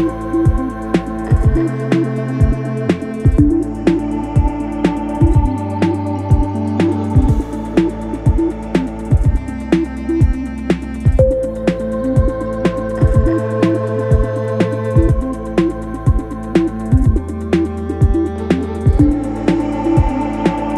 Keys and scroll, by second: 4.0 F1, 4.1 F2, 6.6 0, 6.7 Return, 11.1 3, 13.0 4, 14.0 F1, 14.2 F2, 16.7 3.